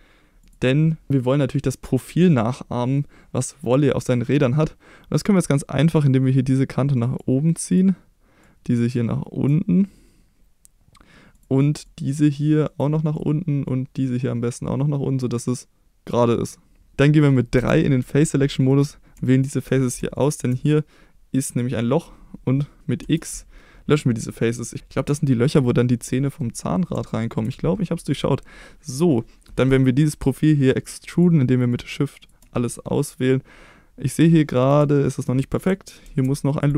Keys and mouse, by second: 0.4 click, 6.0-7.1 drag, 7.7 click, 8.4-9.4 drag, 11.8-12.7 drag, 13.1-16.1 drag, 16.9 4, 17.5 3, 18.7 click, 19.3 click, 21.8 middle click, 23.0 x, 26.1 middle click, 27.0 shift+middle click, 29.6 middle click, 31.1 shift+click, 32.2 shift+click, 32.5 middle click, 34.6 click, 34.9 shift+middle click, 36.0 ctrl+r.